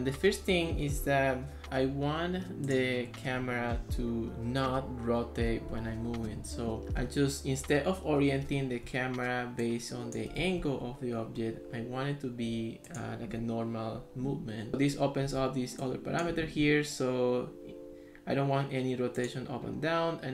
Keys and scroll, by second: 8.9 ctrl+s, 10.6 ctrl+x, 15.5 ctrl+s.